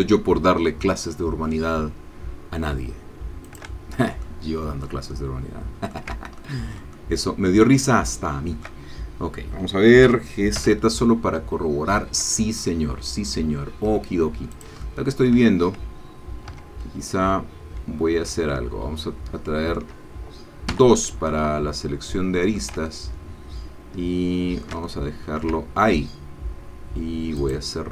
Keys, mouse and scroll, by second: 3.4 shift+click, 4.3 ctrl+middle click, 5.1-12.7 ctrl+middle drag, 10.1 g, 10.5 z, 14.5 shift+click, 16.6 Tab, 17.4-18.1 scroll up 2, 18.1-18.4 scroll down 3, 18.4-19.9 ctrl+drag, 20.7 2, 21.3-22.7 ctrl+drag, 22.8-24.2 ctrl+shift+drag, 24.2 shift+middle click, 24.9-25.9 ctrl+shift+middle drag.